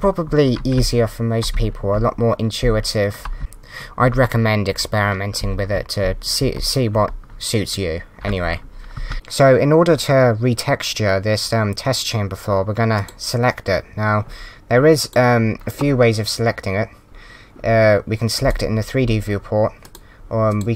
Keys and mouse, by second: 5.4 w, 6.5 w, 8.9 z, 12.9 click, 15.0 click, 18.3 click, 19.8 click.